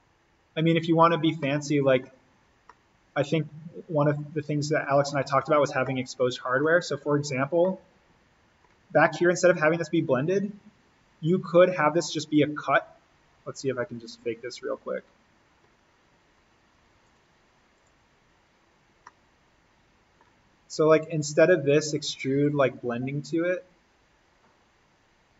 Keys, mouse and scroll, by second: 0.1 scroll down 1, 1.4 middle click, 2.3-2.7 scroll up 1, 2.7-5.1 middle drag, 5.1-5.9 scroll down 1, 5.9 middle click, 6.8-7.1 scroll up 1, 7.1-7.5 scroll down 1, 7.6-9.3 middle drag, 9.3 click, 13.9-15.3 drag, 15.3-16.9 scroll up 1, 17.0 click, 18.5-19.1 scroll down 1, 19.1 middle click, 19.9-21.1 scroll down 1, 21.1 click.